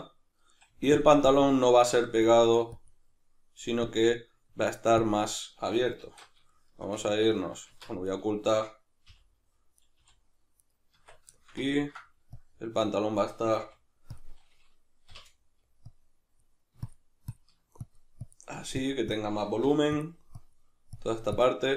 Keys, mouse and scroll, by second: 0.7 f, 1.3-6.5 drag, 6.0 alt+q, 6.5-8.1 shift+middle drag, 7.7 Tab, 8.1 right click, 9.1 h, 9.8 right click, 10.0 h, 10.6 right click, 11.0 Tab, 11.4-12.4 shift+middle drag, 12.4-14.2 drag, 13.6 f, 15.1 k, 15.9-20.0 drag, 19.6 f, 20.3-21.7 drag.